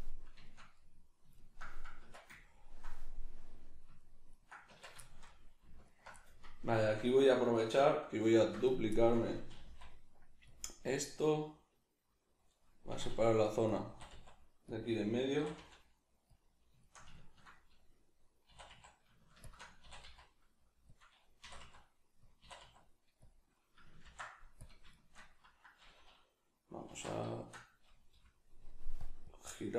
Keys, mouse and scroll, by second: 2.0 Tab, 4.7 Tab, 5.9 alt+right click, 6.1-8.7 middle drag, 8.4 shift+d, 8.7 right click, 8.9-10.6 middle drag, 9.5 g, 10.6 click, 10.7-13.8 middle drag, 12.9 e, 13.8 click, 13.9 e, 14.8 click, 15.4 e, 16.4 click, 16.8-18.5 shift+middle drag, 18.5 e, 19.5 shift+click, 19.8 e, 21.0 click, 21.4 e, 22.3 click, 22.4 e, 23.3 click, 24.0 ctrl+f, 24.9-29.2 shift+middle drag, 26.8 alt+q, 28.1 F9, 29.2-29.7 drag.